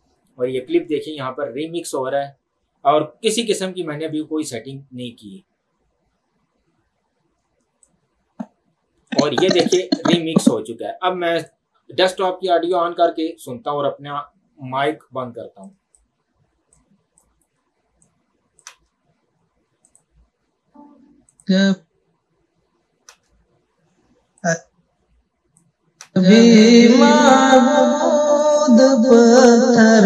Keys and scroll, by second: 18.8 space, 23.1 space, 26.1 space.